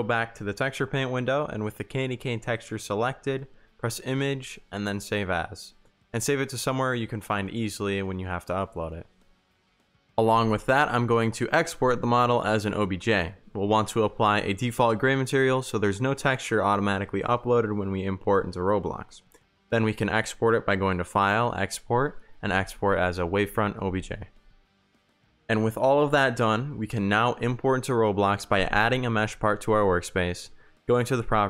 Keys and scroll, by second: 5.3 Tab, 7.4 Escape, 13.5 Tab, 14.6 ctrl+z, 16.7 Tab, 19.0 w, 19.0 Pause, 22.5 m, 22.7 e, 22.8 s, 22.9 h, 23.1 Return, 24.7 r, 26.0 w, 27.9-29.5 typing, 31.2 Pause.